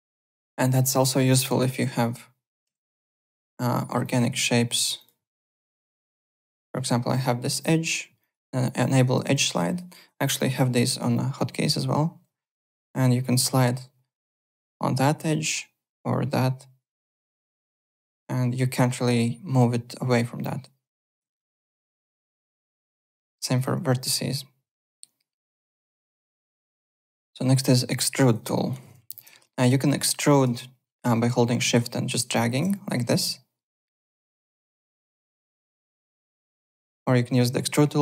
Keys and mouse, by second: 0.3 alt+click, 1.4 click, 2.7 u, 3.1 click, 3.7 alt+middle click, 4.0 alt+click, 5.0 click, 5.6 click, 6.1 alt+click, 6.3 alt+w, 6.4 2, 6.7 alt+click, 8.2 click, 8.8 click, 9.6 click, 10.7 u, 11.3 u, 12.7 click, 17.4 ctrl+z, 17.7 alt+click, 21.2 ctrl+z, 21.4 alt+click, 22.9 ctrl+click, 23.0 ctrl+z, 23.2 1, 23.5 click, 24.1 click, 26.0 ctrl+z, 26.2 click, 26.6 alt+Tab, 26.7 click, 27.5 click, 28.2 click, 28.5 alt+click, 28.6-29.5 typing, 29.1 click, 29.4 alt+middle click, 29.6 alt+click, 30.0 alt+middle click, 31.6 shift+click, 32.7 alt+click, 34.4 alt+right click, 35.0 alt+click, 35.7 alt+right click, 36.0 alt+click.